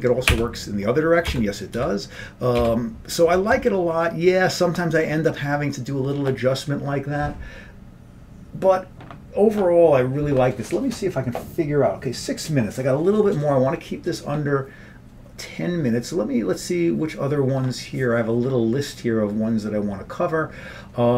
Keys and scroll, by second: 0.4 BackSpace, 1.4 Return, 1.9 Return, 2.7 BackSpace, 3.3 Return, 3.6 Tab.